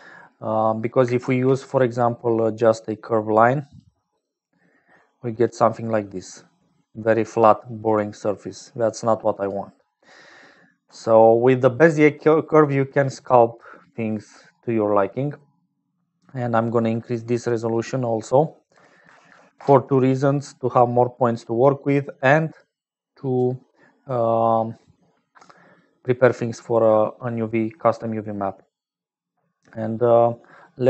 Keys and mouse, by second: 1.2 shift+a, 4.8 click, 6.0-7.3 drag, 8.4-9.6 drag, 9.9 click, 10.8 x, 11.5 click, 17.5-20.3 drag, 21.2 click, 21.8 click, 22.6 click, 23.3 click, 25.0 click, 25.8 click, 26.8 click, 28.6 click.